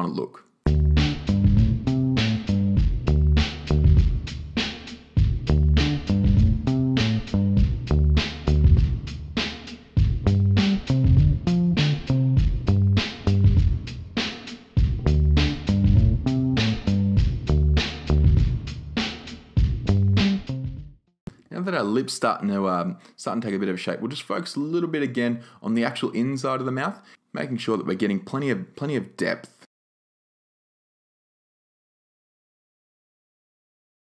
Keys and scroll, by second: 5.1-6.0 typing, 10.9 6, 11.1 Return, 13.5 super+z, 20.9 5, 21.0 Return, 23.5-24.3 typing.